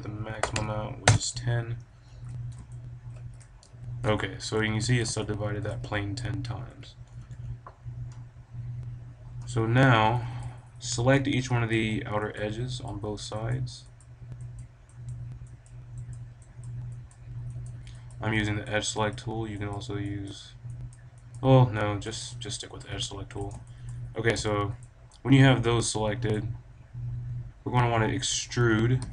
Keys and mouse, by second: 2.6-6.9 drag, 6.6 a, 7.0 b, 22.2-23.7 right drag, 23.0 click, 23.7-27.1 middle drag, 27.1 click, 29.0 e.